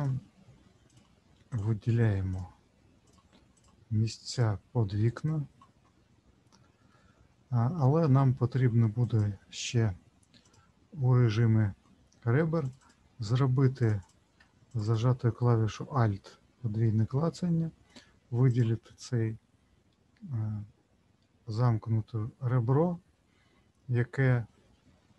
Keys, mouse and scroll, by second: 1.5 shift+click, 2.3 shift+click, 3.5 shift+click, 4.3 shift+click, 5.1 shift+click, 6.9 middle click, 9.0 click, 10.4 click, 12.6 click, 12.8 click, 13.8 ctrl+click, 14.0 ctrl+click, 14.7 alt+click, 14.8 alt+click, 18.5 click.